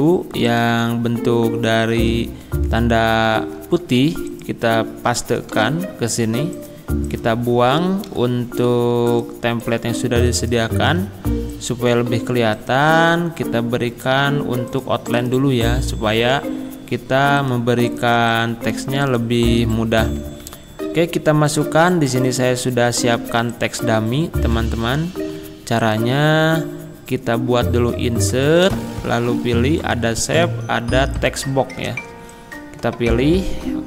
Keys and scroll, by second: 3.4 ctrl+c, 5.6 ctrl+v, 8.1 Delete, 23.0 ctrl+c.